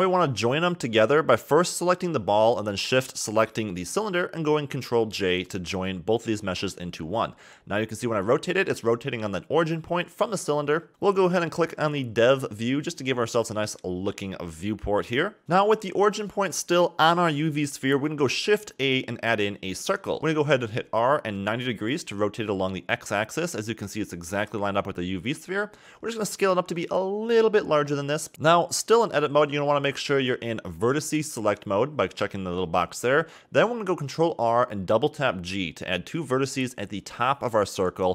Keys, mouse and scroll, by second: 0.2 shift+middle drag, 0.5 scroll up 3, 0.7 click, 3.7 ctrl+j, 5.0 r, 9.1-9.9 scroll up 1, 11.7-13.2 scroll up 2, 13.2 scroll up 1, 13.4-15.3 shift+middle drag, 15.3 shift+a, 18.4 r, 22.5-23.1 scroll up 3, 23.1 shift+middle click, 23.4-24.7 scroll up 8, 24.7 s, 27.7 scroll up 3, 28.0-28.6 shift+middle drag, 28.7-29.2 scroll down 6, 29.3-29.6 scroll down 7, 29.6 shift+middle click, 30.0-31.1 scroll up 8, 31.1 Tab, 31.9-32.3 scroll up 3, 33.8 click, 35.4 g, 37.3 ctrl+r.